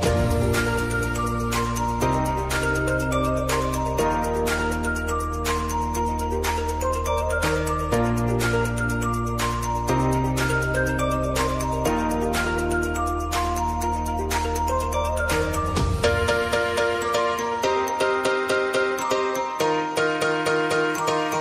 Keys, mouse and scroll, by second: 1.5-8.7 drag, 11.4 ctrl+alt+Home, 13.0 click, 15.6 s, 16.7-21.4 drag.